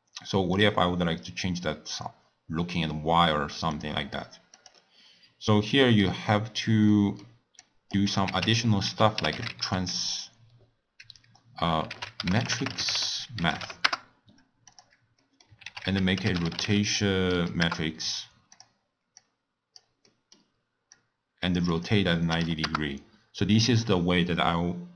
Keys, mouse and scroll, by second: 0.5 click, 3.7 drag, 4.5 click, 5.6-7.6 middle drag, 7.6 click, 8.3 ctrl+a, 15.2 middle click, 15.6 ctrl+a, 19.2-20.0 drag, 20.0 middle click, 20.9-24.7 drag.